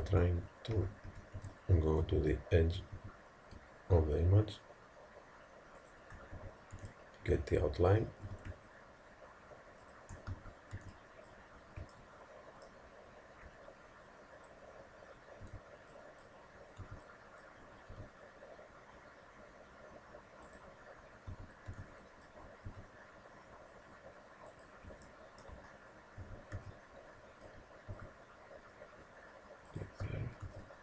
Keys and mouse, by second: 0.1 a, 0.8 a, 1.4 b, 3.0 g, 6.4 a, 6.8 b, 8.3 g, 10.4 a, 10.8 b, 12.0-13.7 middle drag, 15.5 b, 16.8 b, 17.9 g, 21.3 a, 21.7 b, 22.7 g, 25.1-27.9 drag, 26.3 a, 26.6 b, 27.9 g, 30.1 a, 30.5 b.